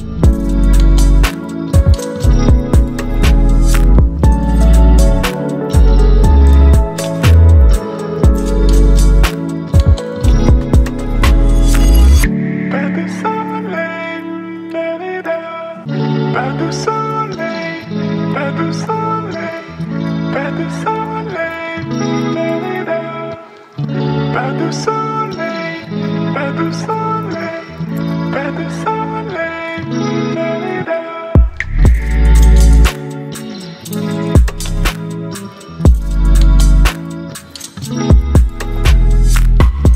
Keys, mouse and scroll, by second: 8.9 right click, 10.5 click, 13.7 ctrl+x, 14.6 ctrl+v, 17.0-18.0 ctrl+drag, 19.7 v, 20.3-22.4 drag, 24.7 p, 27.4-32.5 drag, 38.1 right click, 39.4 click.